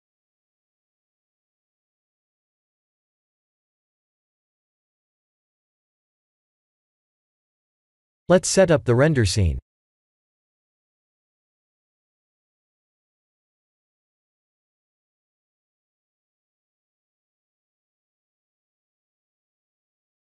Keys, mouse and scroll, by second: 0.1 click, 0.4 middle click, 1.2 middle click, 2.3 shift+middle click, 3.1-3.7 scroll up 1, 3.7 scroll up 1, 4.0 shift+middle click, 4.8 middle click, 6.2 middle click, 9.0 KP_1, 10.0 shift+middle click, 11.3 Down, 11.7 Up, 12.7 KP_8, 13.2 KP_2, 13.4 KP_2, 15.5 KP_2, 17.3 KP_8, 18.5 ctrl+alt+KP_0, 19.3 shift+`.